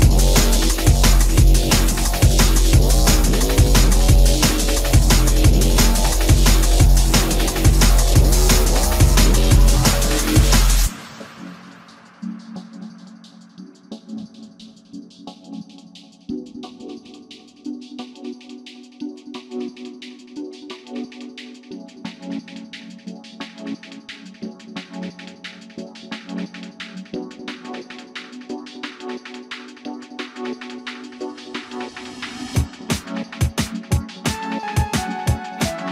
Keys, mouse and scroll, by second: 0.9 space, 3.1 m, 6.2 shift+scroll down 1, 6.8 shift+middle click, 19.7-20.6 typing, 22.8 space, 31.7 e.